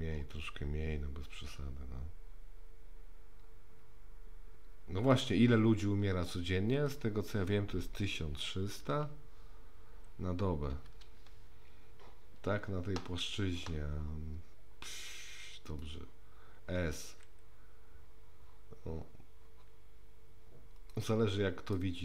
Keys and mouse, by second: 1.3-5.1 drag, 6.8-12.0 drag, 9.0 KP_0, 17.1 s, 21.8-22.0 middle drag.